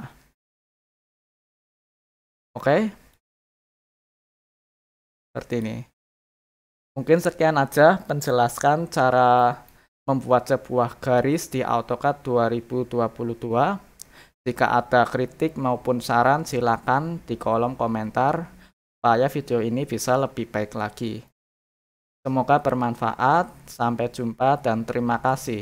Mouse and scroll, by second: 0.6 click, 1.5 click, 3.1 click, 4.1 click, 5.5 click, 6.1 click, 9.4 middle click, 10.2 scroll up 1, 10.6 scroll down 1, 21.3 middle click, 23.2 scroll down 2, 23.7 middle click, 25.2 middle click, 25.2 scroll up 2.